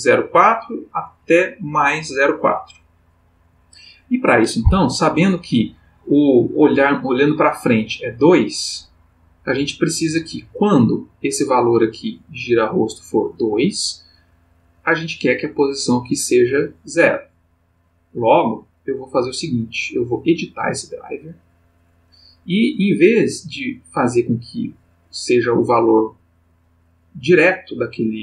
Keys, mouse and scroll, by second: 11.1 click, 15.7 click, 18.3 right click, 20.7 click.